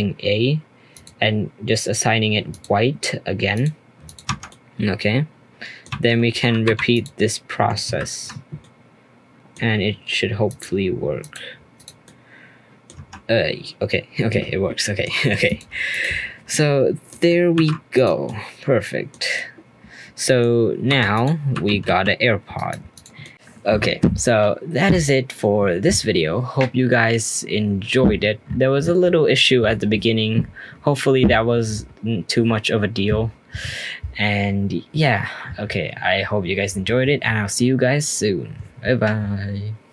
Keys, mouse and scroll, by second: 0.9 click, 2.5 click, 3.5-4.1 drag, 4.3 Tab, 4.5-5.9 middle drag, 5.9 Tab, 6.6 3, 6.9 click, 7.9 ctrl+KP_Add, 8.6-10.4 middle drag, 10.4 click, 11.2 click, 12.0 middle click, 12.9 Tab, 14.3-15.4 middle drag, 15.4 click, 15.9 click, 16.5-17.5 middle drag, 17.5 alt+r, 17.9 click, 18.2-20.4 middle drag, 20.4-20.9 scroll down 1, 20.9 r, 21.1 click, 21.5 r, 22.9 click, 23.2 middle click.